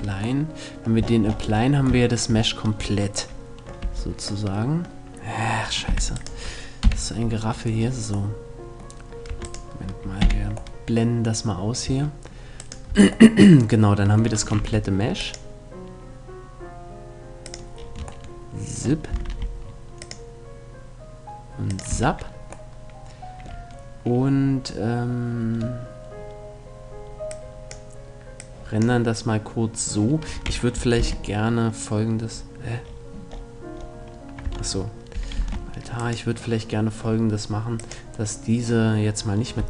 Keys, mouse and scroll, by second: 3.4 z, 5.5 z, 6.4 KP_Decimal, 8.9 Tab, 9.8 h, 10.5 middle click, 11.5 Tab, 12.5 Tab, 14.2 ctrl+r, 17.3-18.7 drag, 18.9 ctrl+r, 21.5-23.2 drag, 21.5 a, 23.2-24.3 middle drag, 26.9-30.6 drag, 30.6 alt+h, 31.9 middle click, 34.1 Tab, 35.0 alt+h, 35.7 right click, 37.5-39.1 drag.